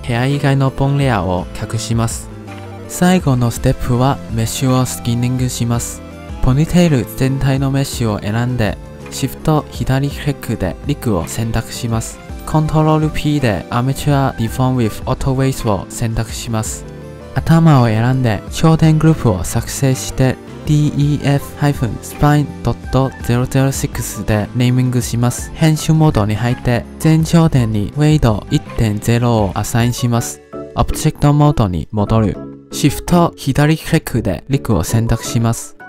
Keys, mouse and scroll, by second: 1.0 scroll up 1, 1.5-2.1 shift+middle drag, 2.1 click, 6.9 click, 7.6 click, 7.9-8.8 scroll down 6, 8.8 shift+click, 11.6 shift+click, 13.2 ctrl+p, 17.9 click, 19.0-19.6 drag, 19.7-22.2 drag, 25.5-25.9 middle drag, 25.9 scroll up 1, 26.4 Tab, 27.4-30.1 shift+middle drag, 30.1-31.9 drag, 31.9 ctrl+Tab, 34.2 shift+click.